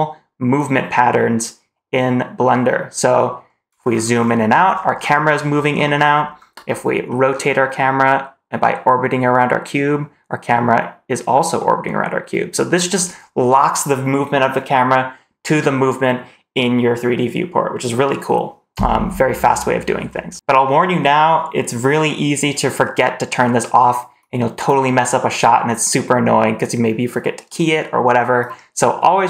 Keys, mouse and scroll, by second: 3.6 scroll down 4, 4.1 scroll up 2, 4.3 scroll down 2, 4.6 scroll up 2, 4.9 scroll down 2, 5.2 scroll up 3, 5.4 scroll down 2, 5.6 scroll up 2, 5.8 scroll down 2, 6.0-6.5 scroll up 3, 6.5-7.0 scroll down 1, 7.0 middle click, 19.3-20.2 scroll down 1.